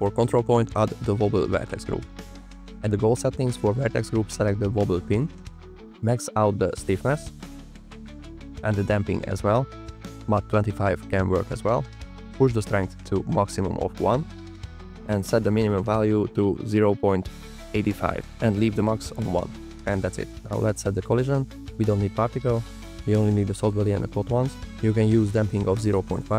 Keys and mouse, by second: 4.3-5.4 drag, 7.9 click, 8.6 click, 10.3 click, 13.2 click, 14.4-16.3 drag, 20.3 click, 21.5-24.7 drag.